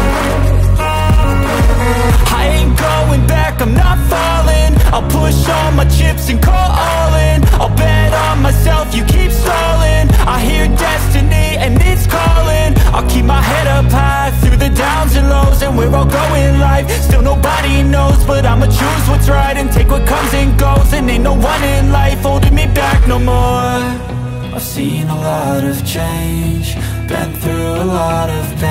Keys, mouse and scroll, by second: 0.0-0.9 typing, 1.5 click, 2.7 alt+shift+click, 3.4 alt+scroll down 1, 3.8 space, 3.9 click, 4.6-6.3 alt+shift+drag, 6.3 space, 6.3 click, 6.6 space, 8.0 click, 10.1 click, 11.3 space, 11.6 alt+scroll up 1, 12.0 space, 12.1 click, 12.4 space, 12.8-16.5 drag, 20.6 click, 21.4 right click, 21.9 click, 25.6 click, 25.7 alt+scroll down 1, 26.0 space, 26.0 click.